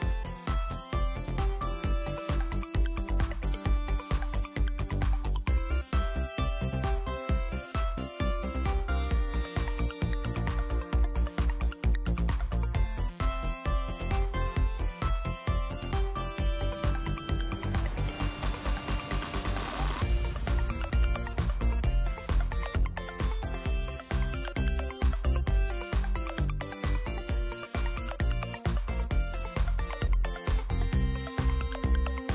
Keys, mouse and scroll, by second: 0.5-1.6 drag, 2.3-4.9 drag, 5.5 click, 7.5 click, 16.2-20.8 drag, 21.1 click, 22.6 click, 25.3 click, 29.8 right click, 31.5 click.